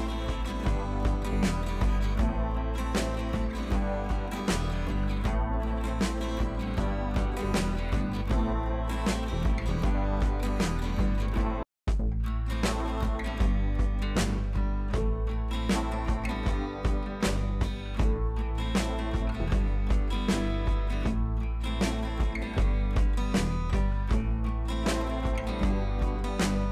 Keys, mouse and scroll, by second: 1.7 right click, 2.0-2.7 click, 2.5 right click, 3.6-4.2 shift+drag, 8.1 Left, 9.0-9.4 click, 10.1 ctrl+Page_Down, 14.7 Left, 15.8 click, 18.0-19.9 shift+drag, 22.9-23.4 shift+click, 24.0 Up, 25.0 click, 25.9 Left.